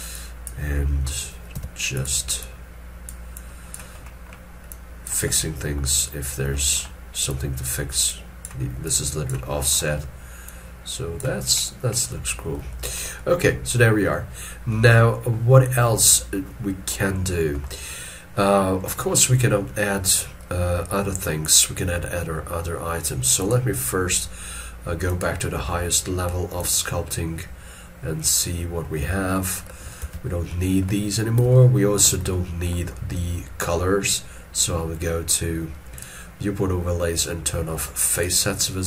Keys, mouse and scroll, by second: 1.5 f, 2.4 double click, 12.7 shift+middle click, 30.0 alt+e, 30.5 middle click, 32.3 shift+middle click.